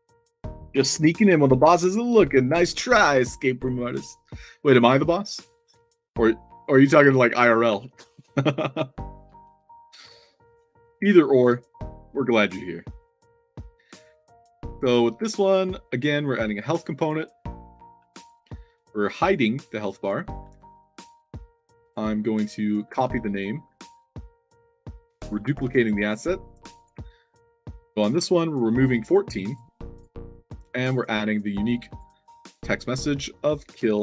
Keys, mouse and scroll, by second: 6.0 shift+middle click, 6.8 scroll down 2, 7.6 a, 9.3 i, 14.0 scroll down 2, 14.6 scroll down 2, 16.5 drag, 17.1 click, 18.6 click, 19.1 click, 20.8 middle drag, 21.7 click, 22.0 middle click, 22.7 click, 23.0 ctrl+c, 23.2 click, 25.3 ctrl+d, 25.9 shift+click, 27.4 click, 29.0 click, 29.4 drag, 29.8 click, 31.6 click, 32.5 click, 33.6-34.0 typing.